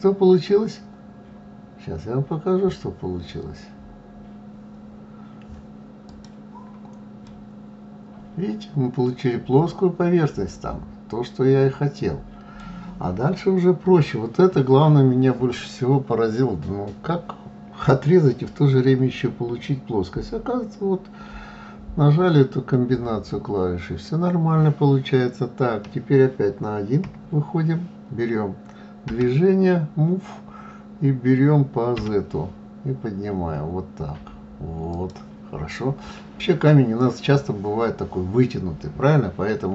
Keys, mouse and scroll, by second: 7.2-10.2 middle drag, 27.0 KP_1, 29.0 g.